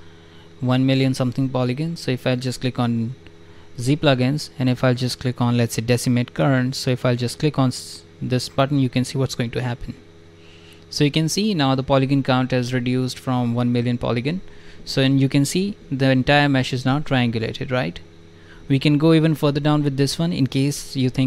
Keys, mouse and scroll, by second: 1.8 click, 7.2 click, 7.2 right click, 10.7 click, 15.4 alt+click, 16.6 shift+f, 17.7 click, 18.3 click.